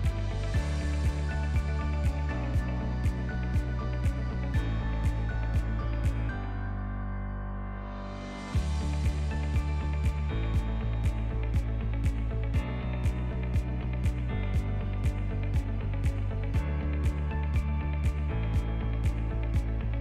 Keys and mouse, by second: 1.3 s, 3.0-4.2 middle drag, 4.6-6.7 drag, 6.7 s, 7.8-9.2 middle drag, 12.1-12.5 ctrl+middle drag, 12.9-13.5 shift+middle drag, 14.2 shift+a, 17.7 s, 19.0-19.9 middle drag, 19.9 click.